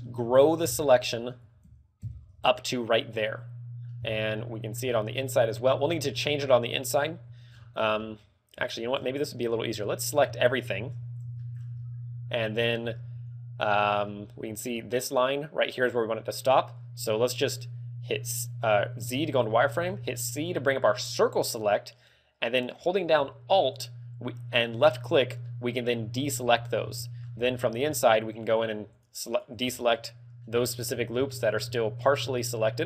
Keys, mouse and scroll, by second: 0.2 ctrl+KP_Add, 0.7 ctrl+KP_Add, 1.4 scroll up 1, 1.6 ctrl+KP_Add, 2.0 ctrl+KP_Add, 2.9 middle click, 3.9 scroll up 3, 4.3 middle click, 4.8 shift+middle click, 5.3-6.0 scroll up 5, 6.0 shift+middle click, 6.4 scroll down 3, 6.6 middle click, 7.0 KP_1, 7.4-7.9 scroll down 4, 7.9 middle click, 8.7 shift+middle click, 9.4 z, 9.7 a, 10.0 a, 10.7 ctrl+KP_1, 11.3 shift+middle click, 11.6 z, 11.7 scroll up 3, 12.5-12.9 scroll down 3, 14.0 z, 14.6 z, 19.0 z, 19.6 c, 24.8 right click, 25.3 middle click, 26.0 z, 26.4 scroll up 4, 26.9 shift+middle click, 27.3 scroll up 2, 28.4 alt+shift+right click, 28.9 alt+shift+right click, 29.2 alt+shift+right click, 29.5 scroll down 5, 29.8 middle click, 30.6 shift+middle click, 30.9 scroll up 3, 31.3 shift+middle click, 31.6 scroll up 4.